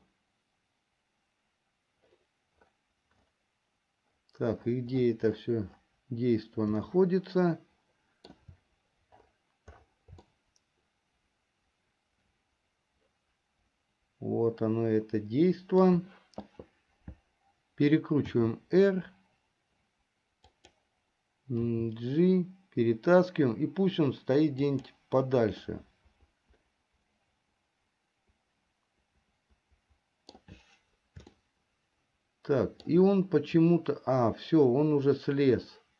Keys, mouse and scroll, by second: 7.4-9.0 shift+middle drag, 10.9-16.3 shift+middle drag, 18.7 r, 22.3 g, 26.4-30.8 middle drag, 31.7-33.8 shift+middle drag.